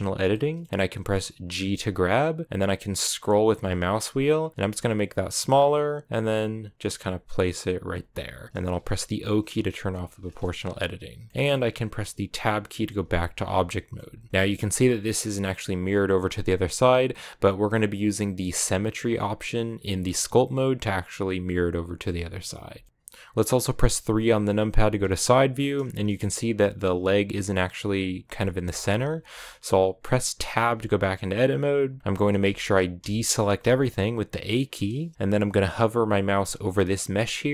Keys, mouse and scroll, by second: 0.1 shift+middle click, 1.0-1.4 scroll down 1, 1.4 g, 9.7 o, 10.0-11.3 scroll down 6, 11.3 shift+middle click, 11.4-12.7 scroll up 1, 12.7 Tab, 13.1 a, 13.5 shift+middle click, 13.9-14.3 scroll up 1, 14.3 shift+middle click, 14.5-22.6 right drag, 22.6 shift+middle click, 22.9-24.4 scroll down 2, 24.4 KP_3, 25.8 shift+middle click, 26.1-28.5 scroll up 1, 28.5-30.4 shift+middle drag, 30.4 Tab, 30.6-32.3 scroll up 2, 32.3 a, 32.8 a, 33.4 a.